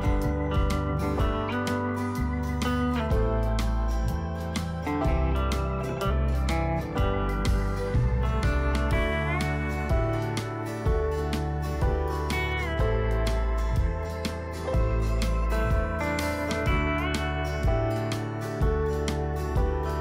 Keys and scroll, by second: 12.8 ctrl+o.